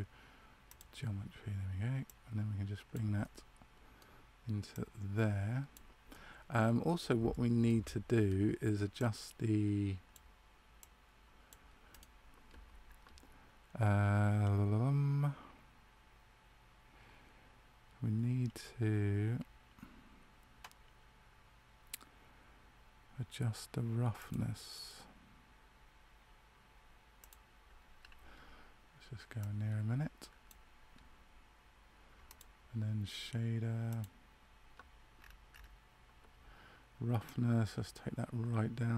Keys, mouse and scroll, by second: 2.0 click, 3.1 middle click, 4.6 click, 6.0 middle click, 7.2 shift+middle click, 7.8 middle click, 8.9 click, 11.9 right click, 24.1 click, 32.2 click, 35.2-35.5 scroll up 3, 37.2 click, 37.2-38.6 scroll up 4.